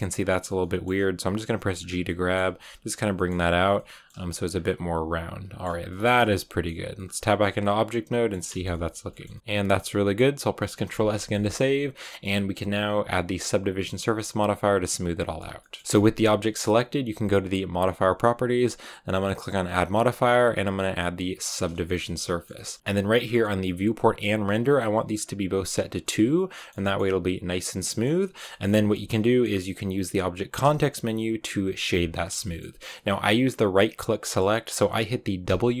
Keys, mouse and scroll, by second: 0.9 g, 1.9 middle click, 2.3 g, 3.0 middle click, 3.2 g, 3.6 middle click, 4.0 g, 4.4 scroll down 4, 4.5-5.5 middle drag, 5.5 scroll up 1, 5.8 middle click, 5.9 Tab, 6.1 middle click, 6.5 scroll down 4, 6.8 middle click, 7.3 scroll down 5, 7.5-8.6 middle drag, 8.6 scroll up 1, 8.9 a, 9.0-11.9 middle drag, 11.9-14.5 scroll up 2, 14.5 right click, 14.7-15.5 scroll down 1, 15.5-21.4 middle drag, 21.4 click, 21.7-25.1 shift+middle drag, 25.1 click, 25.9-28.9 middle drag, 28.9 scroll up 1, 29.1-31.9 middle drag, 32.3-35.8 shift+middle drag.